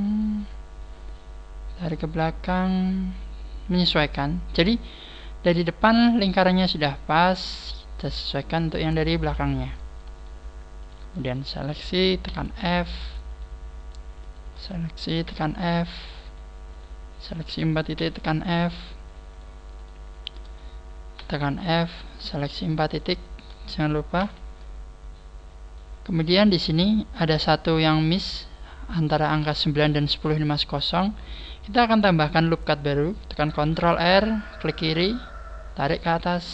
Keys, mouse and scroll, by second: 0.1 right click, 0.9 click, 2.6 right click, 3.1 click, 8.6 click, 10.2 shift+right click, 10.8 shift+right click, 12.3 f, 12.8 shift+right click, 13.4 shift+right click, 14.2 shift+right click, 15.2 f, 15.8 shift+right click, 16.3 shift+right click, 17.2 shift+right click, 18.9 right click, 18.9 f, 19.4 shift+right click, 20.1 shift+right click, 22.0 right click, 22.4 shift+right click, 23.2 shift+right click, 24.2 f, 26.0 middle click, 27.0 scroll up 3, 28.4-28.8 scroll down 4, 30.2 shift+middle click, 32.1 scroll up 5, 33.6 ctrl+r.